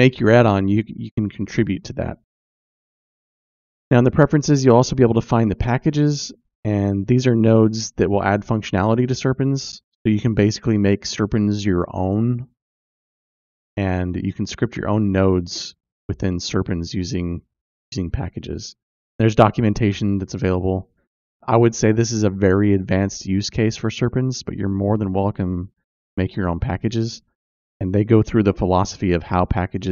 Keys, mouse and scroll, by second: 0.0 click, 2.6 ctrl+space, 5.1 click, 29.7 click.